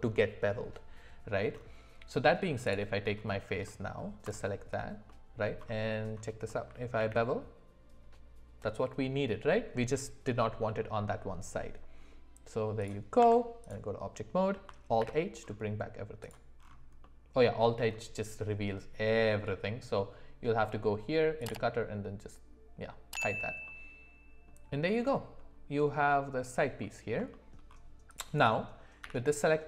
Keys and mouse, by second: 2.6 click, 3.6 middle click, 5.1 middle click, 6.5 middle click, 7.0 ctrl+b, 13.2 Tab, 15.0 alt+h, 17.0 middle click, 21.4 click, 23.7 middle click, 26.8 middle click, 27.3 shift+middle click, 29.0 d.